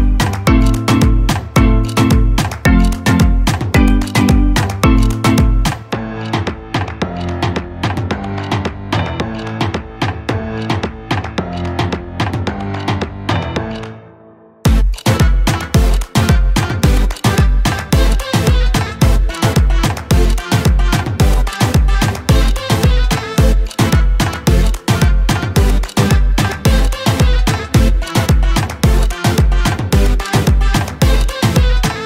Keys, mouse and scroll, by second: 5.7 right click, 6.5 click, 7.9 Up, 12.1 click, 12.7 ctrl+space, 13.0 ctrl+click, 13.3 ctrl+space, 13.9 click, 14.1 space, 16.5-26.0 drag, 27.9-32.0 drag.